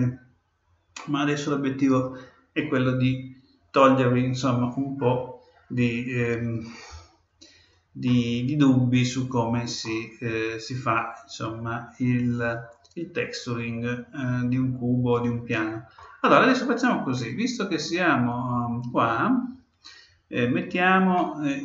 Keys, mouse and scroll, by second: 0.9-2.8 middle drag, 8.0-9.8 middle drag, 10.2-10.9 scroll up 1, 10.9-12.8 middle drag, 18.8-20.7 middle drag, 21.1-21.6 middle drag.